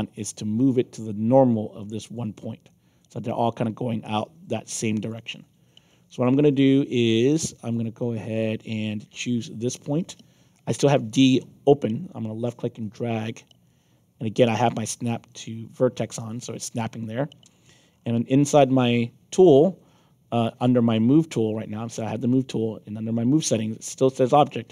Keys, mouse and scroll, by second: 2.3 middle click, 2.6 alt+click, 4.6 alt+click, 5.4 scroll down 2, 5.8 alt+click, 6.7 middle click, 7.1 alt+click, 12.8-14.5 drag, 17.9 middle click, 24.3 click.